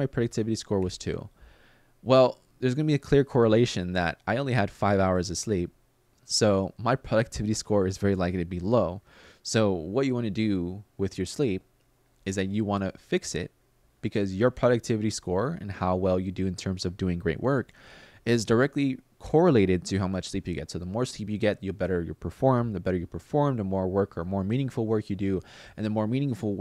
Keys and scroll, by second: 0.5 2, 11.9 super+z, 14.0 super+z.